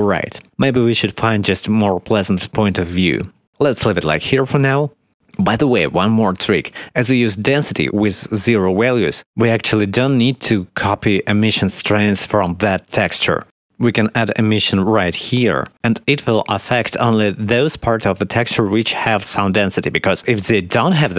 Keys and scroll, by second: 0.4 Escape, 1.7 shift+`.